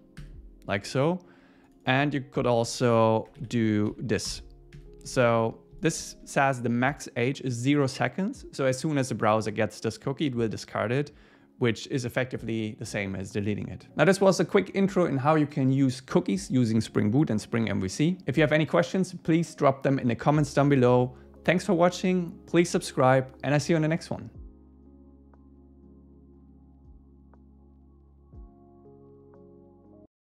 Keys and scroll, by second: 0.2 ↻, 2.7 alt+shift+Right, 3.4 Right, 4.8 Escape, 5.2 super+s.